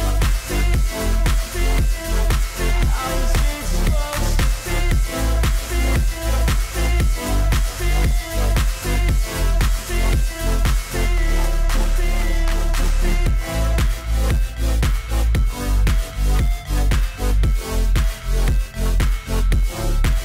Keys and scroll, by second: 1.9 ctrl+t.